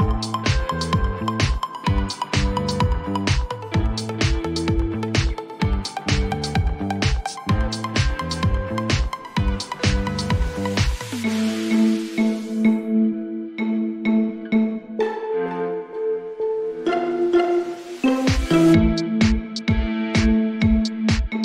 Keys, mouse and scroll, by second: 0.9 click, 0.9-2.4 typing, 3.5 click, 3.5-5.0 typing, 5.3 Return, 6.2 click, 7.5-8.3 typing, 10.4-11.8 scroll, 12.6 click, 15.3 click, 15.5-16.5 typing, 16.8 Return, 17.4 click, 18.5-19.2 typing.